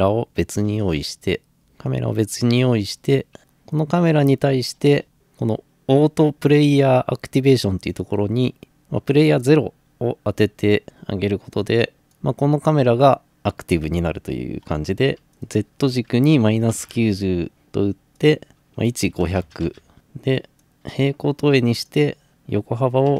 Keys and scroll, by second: 0.0-0.3 typing, 1.4-2.1 typing, 15.2 Return, 15.2 0, 16.3-17.4 typing, 17.5 Return, 18.9-20.0 typing, 22.9-23.1 typing.